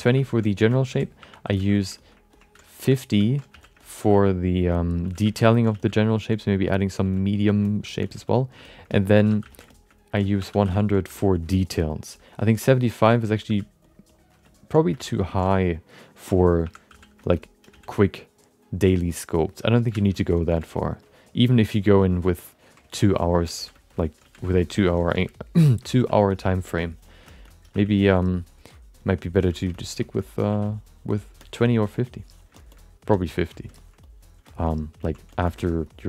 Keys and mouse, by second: 0.1 f, 0.2 alt+shift+middle click, 0.7 alt+shift+middle click, 1.2 1, 1.4 f, 1.7 shift+middle click, 2.0 alt+middle click, 2.3 ctrl+middle click, 2.8 3, 3.2 ctrl+alt+middle click, 3.5 f, 3.8 alt+middle click, 4.1 f, 4.4 click, 4.7 click, 5.1-8.0 typing, 5.2 alt+shift+middle click, 5.4 shift+middle click, 6.0 click, 6.3 click, 7.3 click, 7.6 alt+shift+middle click, 8.2 click, 8.6 shift+middle click, 9.2-11.0 typing, 9.7 alt+shift+middle click, 9.9 alt+middle click, 11.3 click, 11.6 click, 12.1 f, 12.3 click, 12.6 click, 13.0 shift+middle click, 13.2 alt+middle click, 13.4 f, 13.8 click, 14.0 click, 14.4 alt+shift+middle click, 15.0 shift+middle click, 15.1 middle click, 16.6 1, 16.9 f, 17.3 middle click, 17.7 f, 18.0 ctrl+click, 19.0 ctrl+click, 19.9 shift+middle click, 20.1 middle click, 20.6 f, 20.7 ctrl+click, 21.0 ctrl+click, 21.8 click, 22.0 click, 22.5 click, 22.9 middle click, 23.1 alt+shift+middle click, 23.5 f, 23.7 shift+middle click, 23.9 alt+middle click, 24.4 alt+shift+f, 24.4 alt+shift+middle click, 24.6 middle click, 25.9 f, 26.3 click, 26.7 click, 27.2 shift+middle click, 27.4 middle click, 27.7 click, 27.9 click, 29.0 click, 29.5 shift+middle click, 29.7 middle click, 30.0 alt+shift+middle click, 30.1 middle click, 30.5 f, 30.7 click, 31.4 shift+middle click, 31.6 middle click, 32.0 click, 32.5 shift+middle click, 32.7 alt+middle click, 33.1 shift+middle click, 33.2 alt+middle click, 33.8 ctrl+alt+middle click, 34.0 alt+middle click, 34.4 alt+shift+middle click, 34.7 middle click, 35.0 ctrl+alt+middle click, 35.3 alt+shift+middle click, 35.5 alt+middle click, 35.8 click.